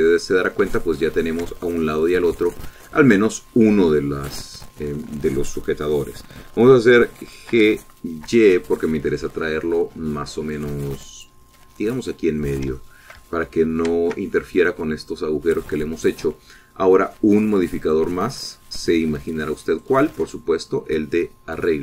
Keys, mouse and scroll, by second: 0.1 shift+middle click, 0.9 shift+middle click, 1.4 shift+scroll down 2, 1.9 shift+middle click, 2.4 shift+middle click, 3.3-4.9 middle drag, 5.1-6.4 middle drag, 8.7 g, 9.4 y, 13.5 click, 14.0 shift+middle click, 14.5 ctrl+shift+middle click, 19.1 click, 20.0 click, 20.9 click.